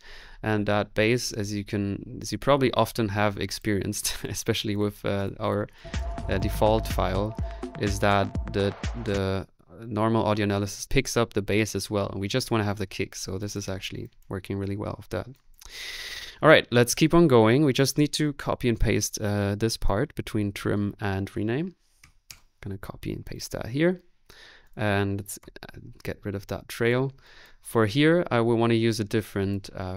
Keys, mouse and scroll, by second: 5.7 click, 6.1 typing, 6.2-7.3 drag, 6.7 middle click, 7.4 click, 8.9 typing, 21.7-22.5 typing, 25.4 Delete.